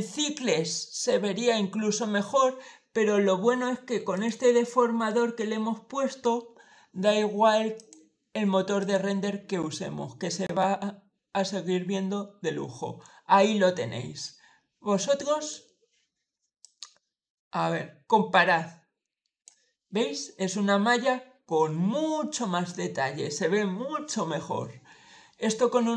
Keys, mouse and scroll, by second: 4.0 click, 7.6 click, 8.6 click, 14.0-15.4 drag, 16.5-19.3 drag.